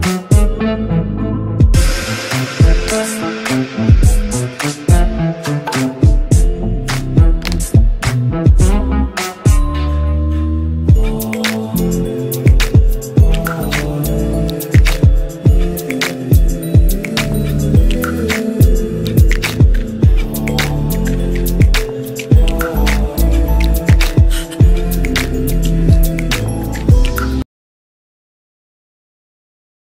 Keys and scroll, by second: 10.7 ctrl+z.